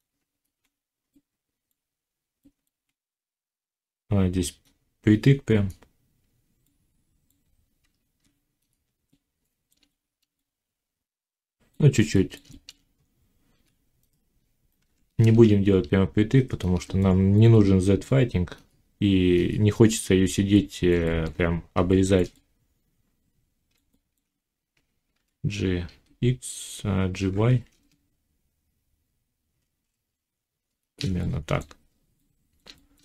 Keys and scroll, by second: 7.7 Tab, 14.7 y, 25.1 g, 27.1 y.